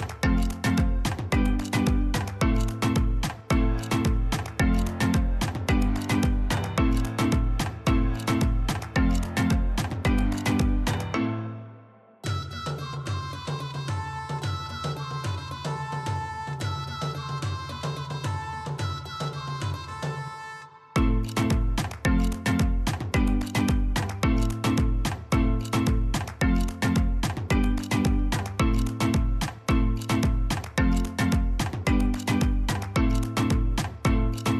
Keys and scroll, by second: 6.1 ctrl+z, 6.3 ctrl+z, 7.0 ctrl+z, 23.2 ctrl+z, 33.9 ctrl+v, 33.9 typing.